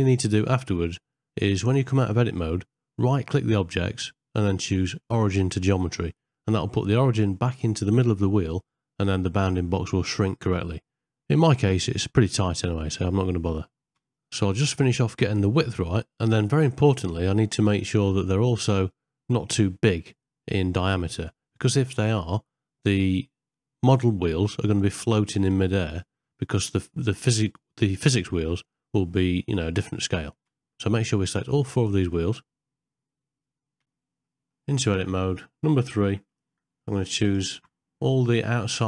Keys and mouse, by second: 4.5 ctrl+middle click, 5.0 shift+middle click, 5.6 middle click, 6.1 click, 6.9 Tab, 8.4 click, 10.9 3, 11.1 click, 11.8 shift+click, 12.4 middle click, 20.3 middle click, 27.5 middle click, 29.4 click, 30.4 shift+click, 31.6 shift+click, 32.1 middle click, 34.3 middle click, 36.3 3, 38.0 click, 38.5 middle click.